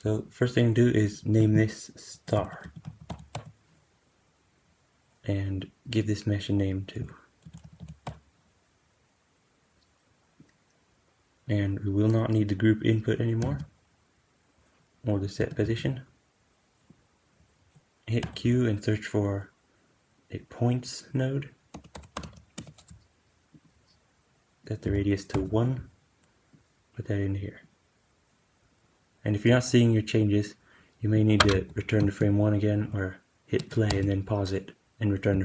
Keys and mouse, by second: 5.9-15.1 drag, 13.3-13.8 typing, 15.4 super+x, 18.1 q, 24.5-35.4 drag, 31.9 shift+Left, 33.5 space, 33.8 space, 35.3 shift+Left.